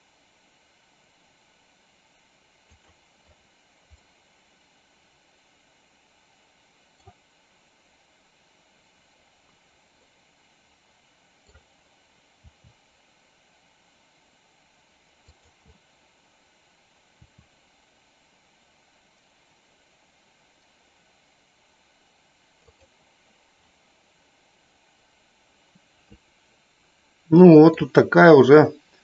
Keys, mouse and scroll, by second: 4.8-7.8 middle drag, 10.8-12.7 middle drag, 16.3 click, 25.4-28.6 middle drag.